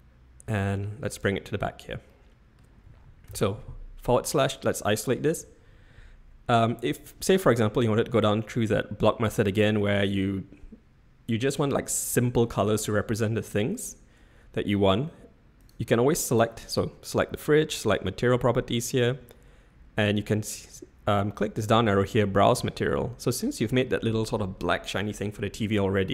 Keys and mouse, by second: 2.1-2.5 middle drag, 3.3 /, 4.2-4.7 middle drag, 15.7 click, 16.7 click, 22.0-26.1 drag.